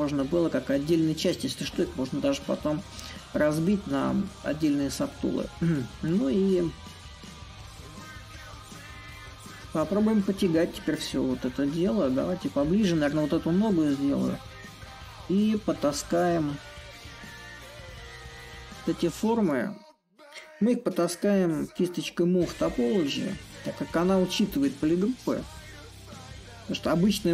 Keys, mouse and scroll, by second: 0.0-5.0 drag, 6.2-11.2 drag, 13.7-19.5 middle drag, 22.3-27.3 drag.